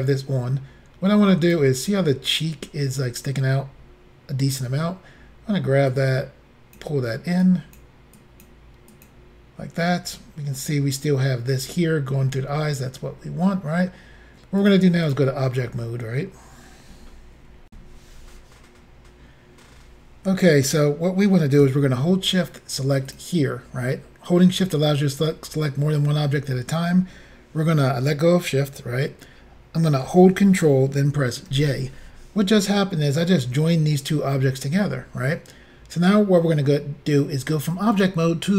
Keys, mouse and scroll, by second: 1.4 click, 5.9 click, 7.4 click, 8.1 click, 8.9 click, 14.6 click, 15.1 click, 17.7 Insert, 23.1 shift+click, 31.5 ctrl+j, 38.0 click.